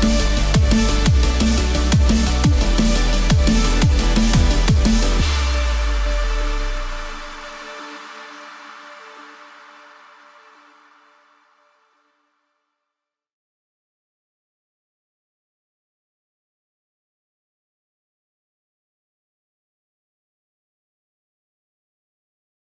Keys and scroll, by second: 4.4 Return.